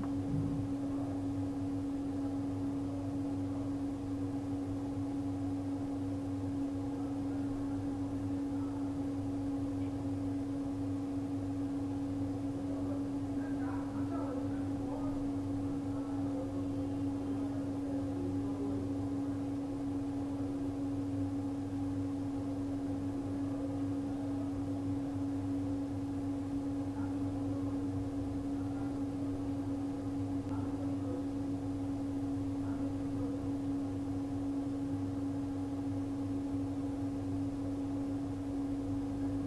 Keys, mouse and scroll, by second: 12.0 click, 26.4 click, 32.6 scroll up 1, 33.2 ctrl+Num_Lock, 33.5 ctrl+KP_0, 34.2 click.